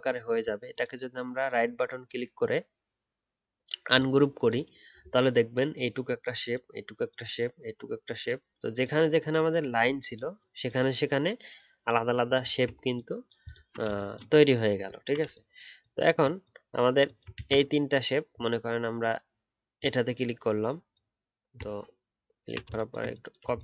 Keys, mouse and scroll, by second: 12.5-13.6 alt+scroll down 1, 13.6-14.9 alt+scroll down 1, 14.9-17.1 alt+scroll down 1, 17.2 alt+scroll up 1, 17.3 ctrl+z.